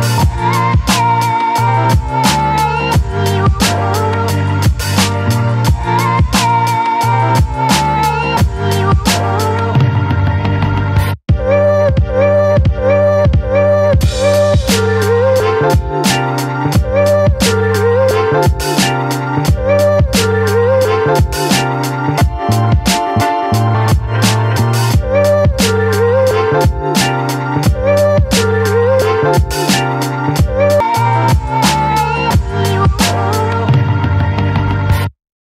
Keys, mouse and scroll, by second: 0.2 click, 1.9 right click, 2.6-9.9 drag, 15.8 click, 16.8 click, 18.2 click, 21.4 click, 22.9 ctrl+2.